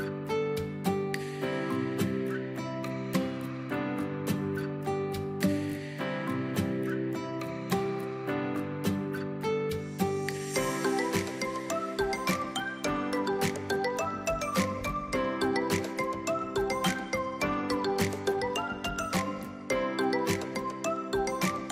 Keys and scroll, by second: 1.6 space, 2.1 a, 2.6 i, 4.5-8.7 typing, 10.2 2, 10.6 3, 11.0 Escape, 13.2 t, 14.4 4, 14.6 space, 17.6 space, 18.6-20.7 typing, 21.4 Escape.